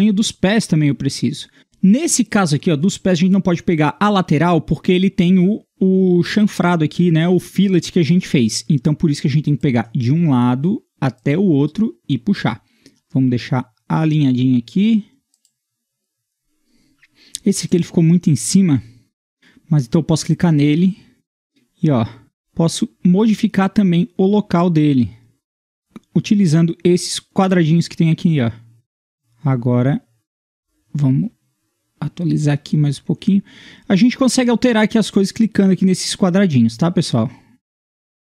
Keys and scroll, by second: 16.4 Escape.